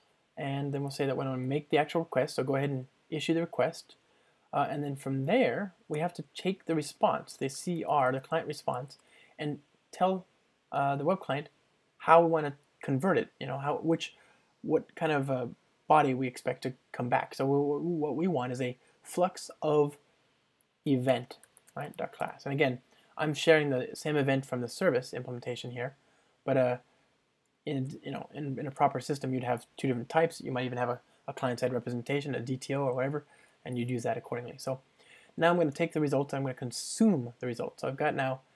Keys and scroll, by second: 3.0 Return, 9.9 Return, 20.0 Return, 27.9 alt+Return, 35.8 Return.